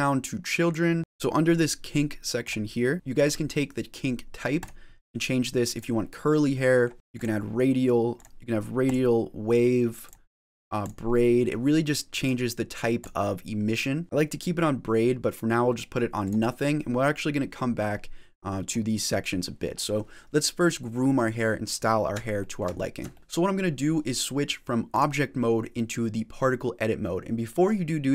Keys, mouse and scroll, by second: 1.0 click, 2.3 click, 4.4 click, 6.2 middle click, 6.9 click, 8.0 click, 9.9 click, 12.1 click, 14.0 click, 18.5 click, 19.7 middle click, 22.2 shift+middle click, 22.6 scroll down 1, 23.0 shift+middle click, 24.8 click.